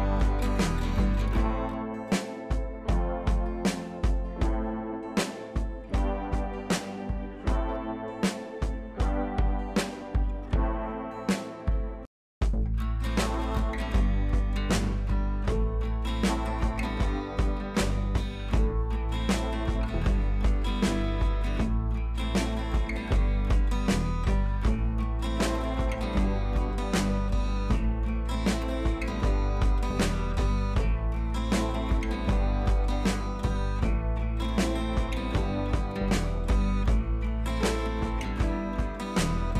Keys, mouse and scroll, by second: 3.9 scroll down 1, 5.8-6.3 scroll up 2, 8.3 click, 8.9 t, 9.1-10.5 drag, 14.0 ctrl+c, 14.2 click, 14.7 ctrl+v, 15.3 click, 17.6-19.6 scroll down 1, 21.2 scroll down 1, 27.4-28.5 scroll down 2, 29.5-31.7 scroll down 1, 33.2-35.1 scroll down 1, 36.1 scroll down 1, 36.8 scroll up 1, 37.0-37.6 drag.